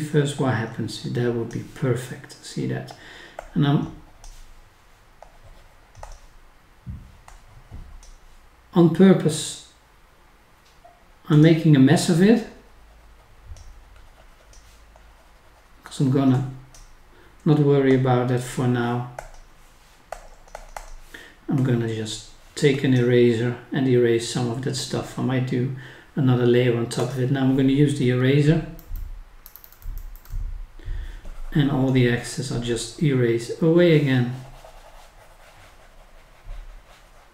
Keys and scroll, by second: 28.8 scroll down 1, 29.4 scroll up 1.